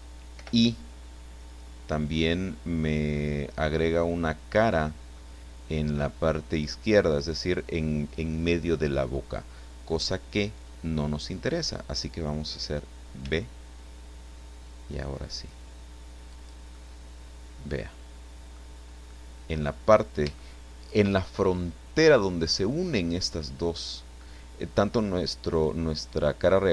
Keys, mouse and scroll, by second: 0.3 i, 13.2 b, 16.3 click, 16.7-18.7 middle drag, 18.7-19.1 scroll up 2, 20.3 shift+right click.